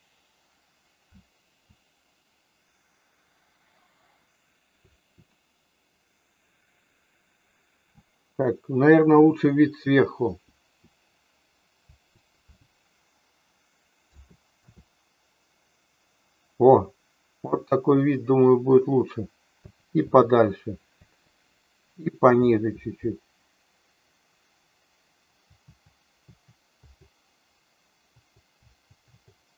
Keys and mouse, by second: 1.0 Right, 4.7 Up, 10.5 Up, 11.9 Down, 14.1 Left, 14.5 Left, 19.6 Down, 22.4 Up, 22.6 Up, 25.3 Down.